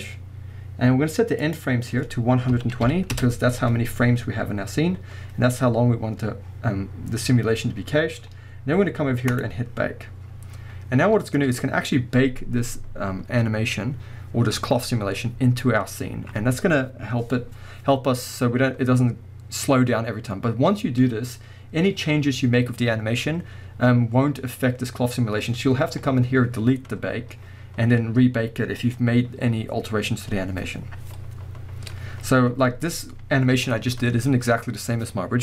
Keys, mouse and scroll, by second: 0.0-1.4 scroll down 2, 1.4 click, 3.2 Return, 9.3 click.